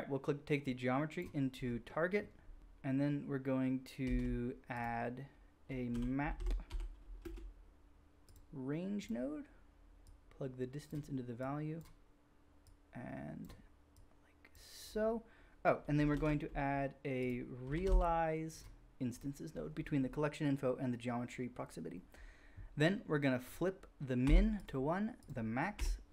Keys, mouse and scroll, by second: 0.6-2.7 drag, 4.0 shift+a, 4.1-9.1 drag, 9.1-10.0 middle drag, 10.0-15.9 drag, 16.1 shift+a, 16.2-19.2 drag, 19.2-21.2 middle drag, 23.5-24.6 drag, 25.2-26.1 drag.